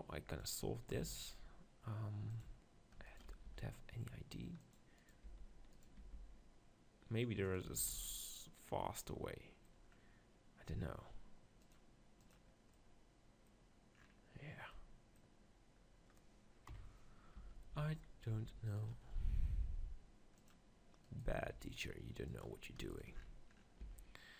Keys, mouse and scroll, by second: 0.3-2.3 right drag, 0.9 g, 2.4-4.2 drag, 3.1-5.0 right drag, 3.5 e, 4.7-6.6 drag, 5.2-7.0 right drag, 5.2 b, 6.0 g, 7.5-9.4 right drag, 7.7 Tab, 7.9 z, 12.3-13.4 drag, 12.7 middle click, 16.7 KP_7, 17.4 Tab, 17.7 z, 18.7-21.4 middle drag, 19.6 g, 21.4 g, 23.8 e.